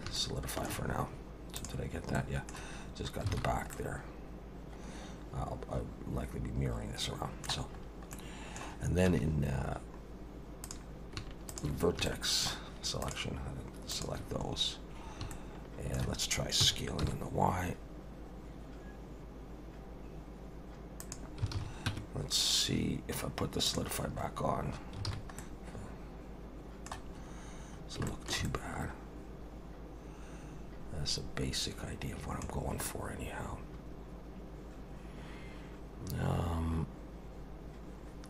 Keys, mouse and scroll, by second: 0.2 shift+middle click, 1.6 click, 2.2 middle click, 2.8 scroll down 3, 3.3 alt+a, 3.7 middle click, 7.8-8.1 scroll up 2, 8.1 middle click, 9.1 1, 9.6 scroll down 4, 10.6 click, 11.5 shift+click, 12.0 shift+middle click, 13.0 shift+click, 13.9 shift+click, 15.0 scroll up 2, 15.3 shift+middle click, 16.6 s, 21.5 alt+a, 21.9 Tab, 22.2-23.7 scroll down 4, 23.7 click, 24.2 scroll up 3, 24.7 scroll down 1, 25.1 alt+a, 25.4 middle click, 27.2 scroll up 2, 27.7 scroll down 2, 28.1 shift+middle click, 28.4 middle click, 32.5 scroll down 3, 32.9 middle click.